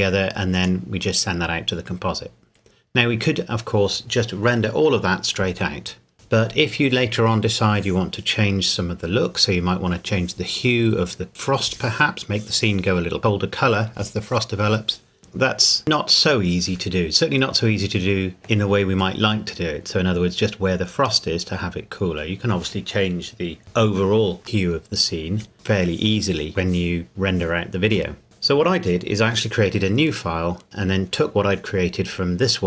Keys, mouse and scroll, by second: 18.4 middle click.